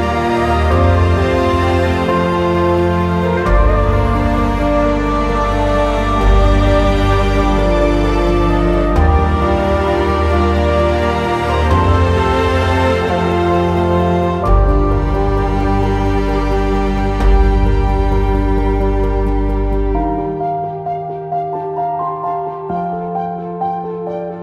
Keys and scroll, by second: 10.3 g.